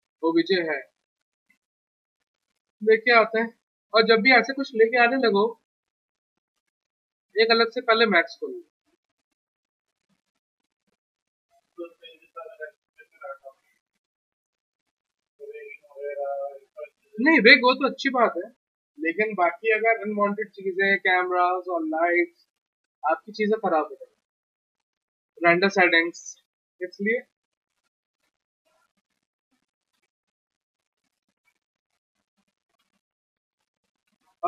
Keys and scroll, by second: 1.2 alt+d, 1.5 ctrl+c.